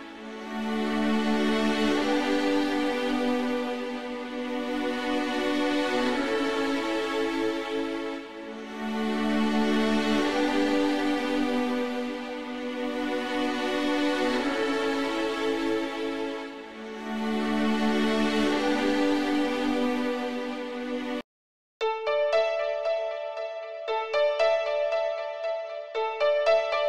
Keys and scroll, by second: 16.0 e, 21.1 typing.